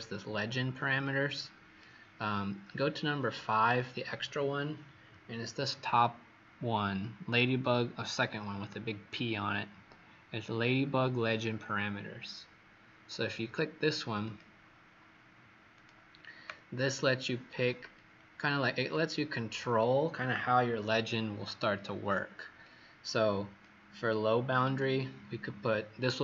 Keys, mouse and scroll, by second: 16.9-17.4 scroll down 2, 17.9 click, 24.7 click.